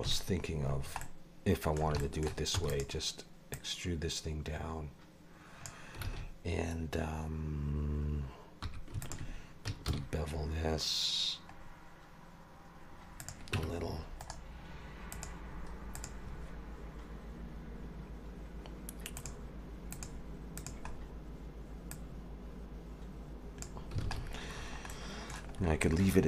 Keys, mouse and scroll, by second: 0.0 KP_Decimal, 0.7 scroll down 1, 1.0 middle click, 2.0 shift+middle click, 2.5 e, 3.5 click, 6.0 alt+a, 8.6 2, 9.0 alt+shift+click, 9.9 ctrl+b, 13.5 Tab, 14.2 right click, 15.5-16.0 scroll down 2, 16.0 click, 19.2 click, 20.9-21.9 scroll down 3, 21.9 click, 24.0 alt+a, 24.2-24.8 scroll down 10, 24.9 middle click, 25.6-26.2 scroll up 3.